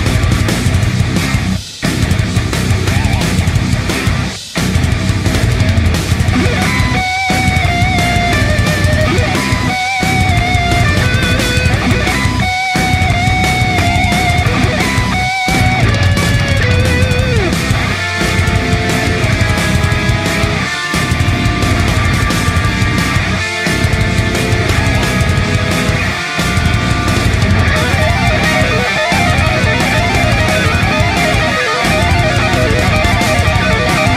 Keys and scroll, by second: 15.5 ctrl+z, 23.4 typing.